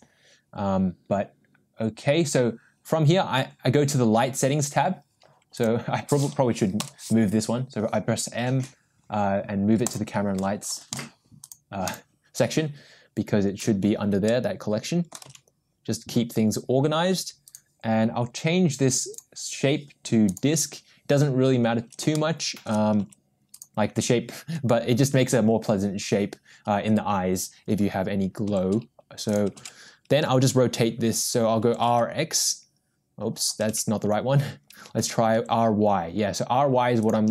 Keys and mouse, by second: 5.5 click, 6.8 m, 11.9 click, 14.4-15.1 middle drag, 15.3 g, 19.2-20.4 drag, 22.1 shift+middle click, 23.0 g, 28.5 r, 31.0 ctrl+z, 31.8 r, 34.6 ctrl+z, 35.1 r.